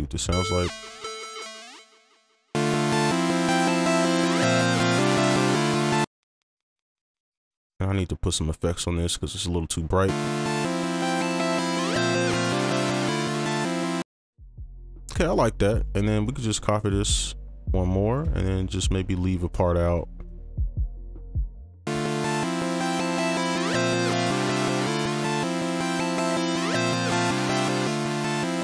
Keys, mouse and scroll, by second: 0.6 right click, 1.4 right click, 2.5 alt+space, 4.6 alt+click, 6.0 space, 9.3 right click, 10.1 space, 14.0 space, 14.5 alt+click, 18.6 right click, 20.2 alt+click, 21.2 right click.